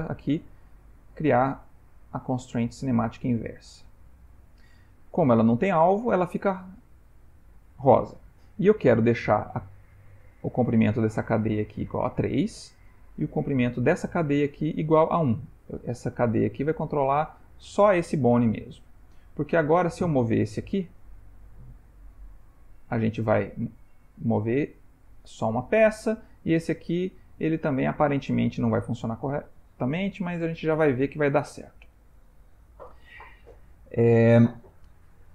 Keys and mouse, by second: 0.2 click, 9.9 click, 10.5 click, 11.5 click, 13.0 click, 14.6 click, 15.2 click, 16.7 click, 19.3 click, 20.1 r, 22.0 click, 22.4 g, 25.6 click, 25.8 r.